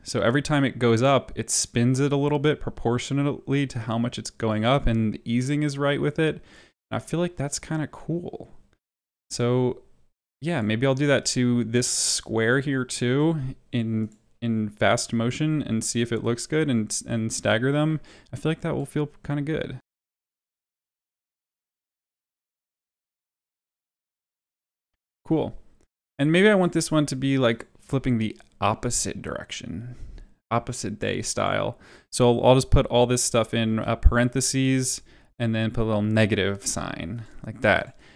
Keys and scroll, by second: 6.6 space, 9.2 space, 20.0 Delete, 21.9-24.9 typing, 32.8 Left, 33.6 shift+9, 34.0 Down, 34.5 shift+0, 34.9 Up, 36.6 -.